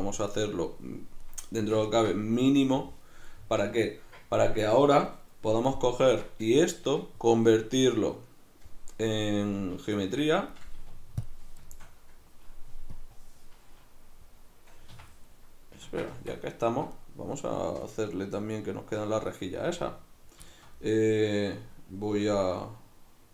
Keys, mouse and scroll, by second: 9.6 z, 10.8 q, 13.0-15.4 drag, 15.0 Escape, 15.4-17.0 middle drag, 16.2 Tab, 17.0-19.7 right drag, 19.7-23.3 middle drag.